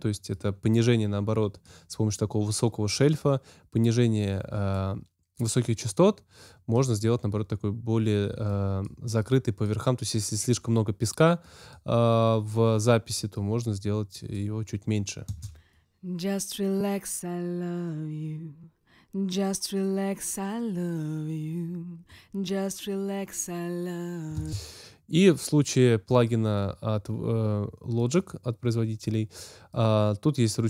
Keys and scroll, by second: 15.2 space, 24.3 space.